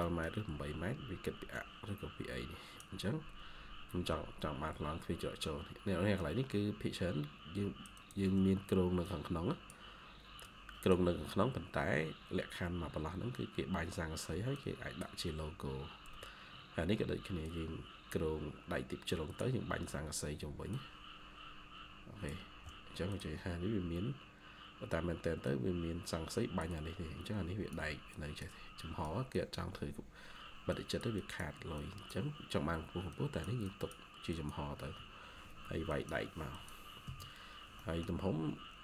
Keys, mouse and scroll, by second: 0.9 ctrl+q, 6.1 ctrl+click, 6.4 ctrl+q, 7.8 ctrl+click, 20.6 ctrl+click, 31.1 double click, 32.1 ctrl+q, 37.7 middle click, 38.0-38.8 scroll down 1.